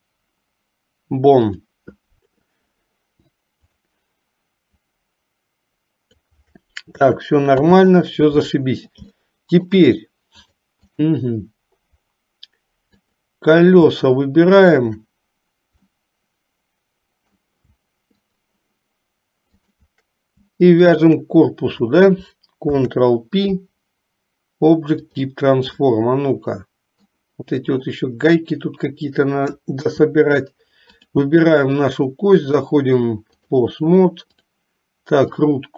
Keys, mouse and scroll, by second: 3.7 click, 5.0-6.5 drag, 7.7 ctrl+z, 9.3 shift+middle click, 10.6 click, 13.1 click, 14.7 shift+click, 15.9-17.6 middle drag, 18.3 shift+click, 19.8 shift+click, 21.1 shift+click, 22.7 ctrl+p, 25.9-27.3 middle drag, 29.8 KP_3, 31.1 click, 32.7 click, 34.5 click, 35.5-35.7 drag.